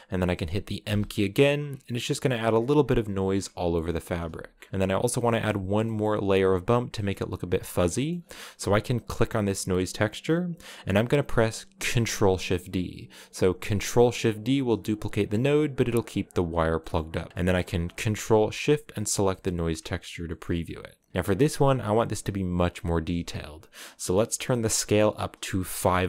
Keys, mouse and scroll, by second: 0.6 m, 1.5-1.9 scroll down 3, 2.1-2.4 scroll down 4, 3.1 scroll down 7, 8.9-11.7 drag, 11.7 ctrl+shift+d, 18.7 ctrl+shift+click, 19.1 middle click, 19.5 scroll up 2, 20.2-21.1 scroll up 6.